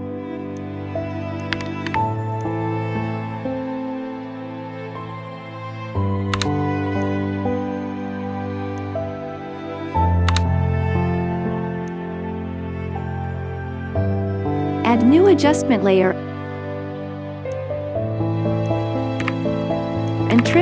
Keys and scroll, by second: 1.4 KP_1, 1.8 KP_0.